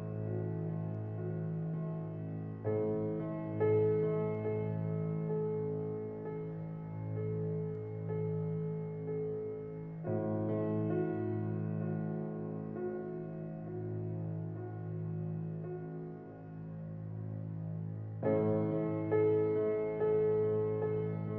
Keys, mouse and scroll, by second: 0.4 click, 2.4 x, 4.9 shift+a, 17.0-21.3 drag.